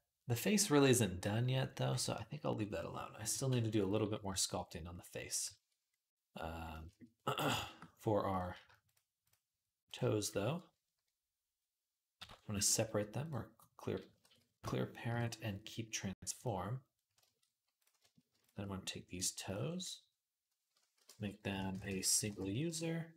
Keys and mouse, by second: 3.7 click, 8.1 click, 8.7 shift+click, 9.7 shift+click, 9.8-18.2 shift+middle drag, 12.0 alt+p, 14.1 ctrl+z, 14.9 alt+p, 17.6 click, 18.2 shift+click, 18.3 shift+middle click, 19.0 shift+click, 19.1-23.1 shift+middle drag, 20.8 F3.